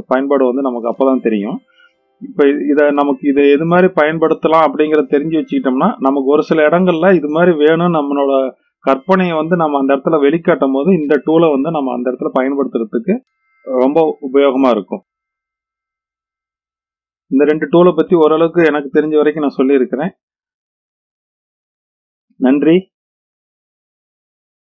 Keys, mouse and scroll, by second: 1.2-1.8 middle drag, 2.3-2.8 scroll down 2, 2.8-3.8 middle drag, 5.5-6.9 middle drag, 12.8 click, 15.2-16.0 middle drag.